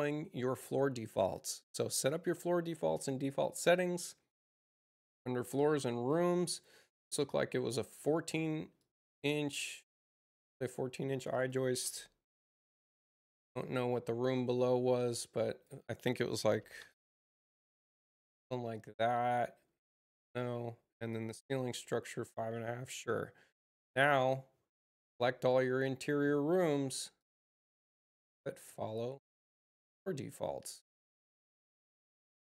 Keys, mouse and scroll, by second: 1.9 click, 3.2 click, 3.4 click, 6.4 click, 8.7 click, 11.0 click, 11.3 click, 12.2 1, 12.4 Return, 13.4 click, 15.3 drag, 17.6 Tab, 22.8 click, 24.0 click, 25.4 click, 27.1 click, 28.6 click, 31.1 click.